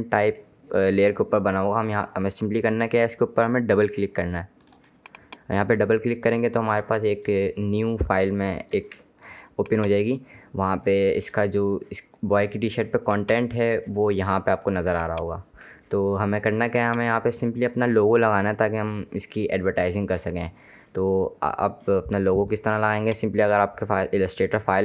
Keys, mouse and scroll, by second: 4.7 click, 8.9 ctrl+Num_Lock, 9.1 ctrl+space, 9.3 ctrl+click, 12.8 click, 22.6 click.